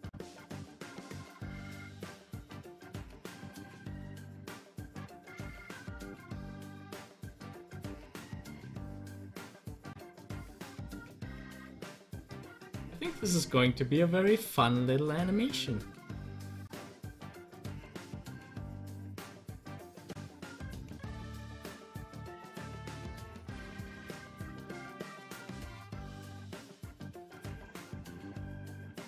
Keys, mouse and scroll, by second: 5.0 click, 8.4-16.4 drag, 16.4 ctrl+z, 19.2 ctrl+z, 22.5 ctrl+z, 24.0 ctrl+z, 24.5-29.0 drag.